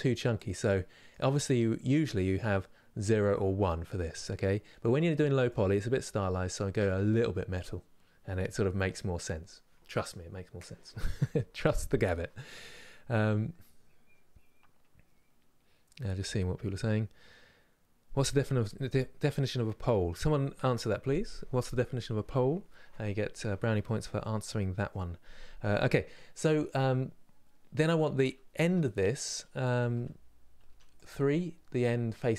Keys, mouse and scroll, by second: 0.1-6.5 drag, 6.5-27.5 middle drag, 27.5 click, 28.2 Tab, 29.6 2, 30.6 click, 30.9-32.3 middle drag.